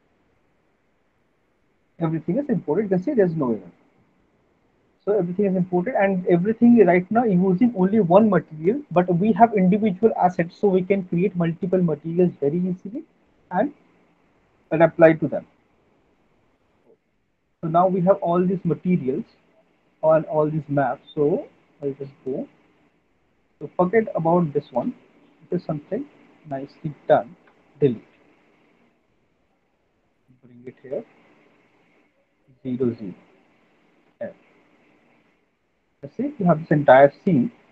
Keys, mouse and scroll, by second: 15.4 click, 16.7 click, 24.8 click, 25.1-25.5 scroll, 26.6-31.2 alt+middle click, 26.6-27.0 scroll, 27.5 Delete, 31.2 click, 32.5 click, 33.9 alt+middle click, 34.2 f, 35.3 alt+right click.